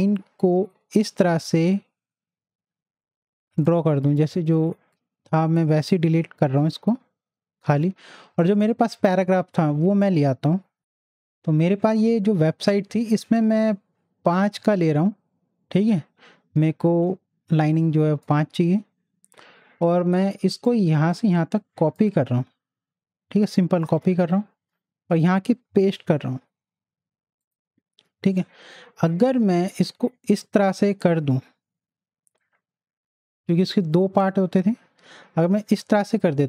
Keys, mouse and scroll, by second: 11.1 super+click, 11.8 scroll down 1, 12.8 scroll down 1, 13.3 scroll down 1, 17.8 scroll down 1, 17.8-19.4 drag, 19.4 scroll down 1, 20.6-22.5 drag, 22.5 ctrl+c, 23.9 alt+Tab, 25.9 ctrl+v, 27.4 click, 29.7-36.4 drag.